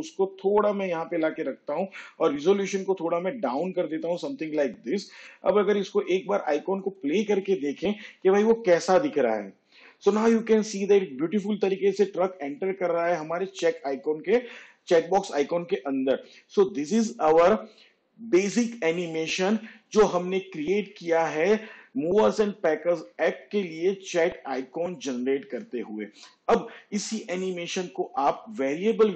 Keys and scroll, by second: 1.1 n, 8.4 space.